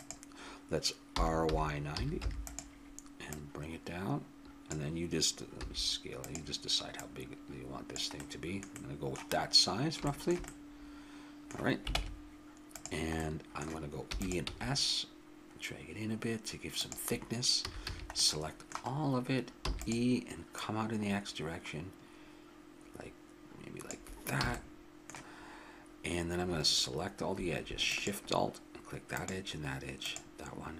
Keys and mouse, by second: 1.1 r, 3.2-5.2 drag, 5.6 s, 6.9-7.9 drag, 11.9 ctrl+Tab, 14.1 e, 14.4 s, 17.6 a, 17.8 a, 18.2 middle click, 18.6 middle click, 19.6 e, 20.6-22.8 drag, 24.4 a, 24.7-27.0 middle drag, 27.9-30.7 drag.